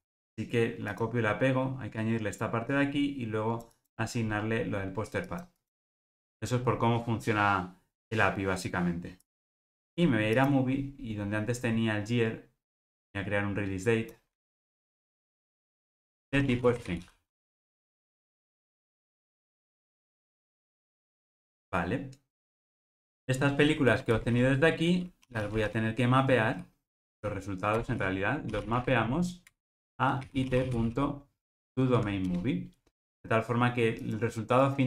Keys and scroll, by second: 10.4 super+b, 18.3 alt+super+[, 22.8 alt+super+l, 27.8 Return.